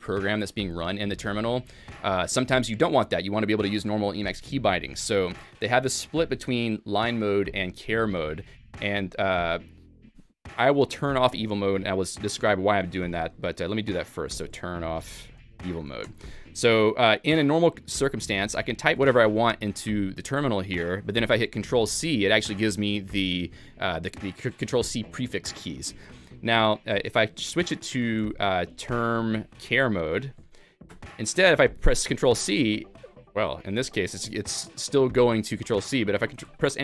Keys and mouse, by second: 10.8 alt+x, 11.6 Escape, 12.1 a, 12.3 alt+x, 13.1 Escape, 13.5 alt+x, 15.7 ctrl+j, 16.1 Return, 28.2 alt+x, 30.9 Return, 36.4 ctrl+x.